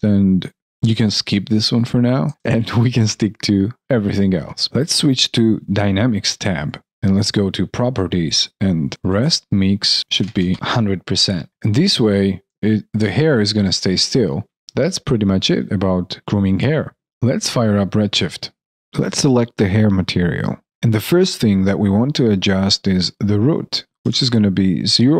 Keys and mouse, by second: 2.3 alt+click, 2.5 alt+right click, 3.1 alt+middle click, 12.5 alt+click, 13.1 alt+right click, 13.5 alt+click, 14.4 alt+click, 14.7 alt+middle click, 15.1 alt+right click, 15.5 alt+click.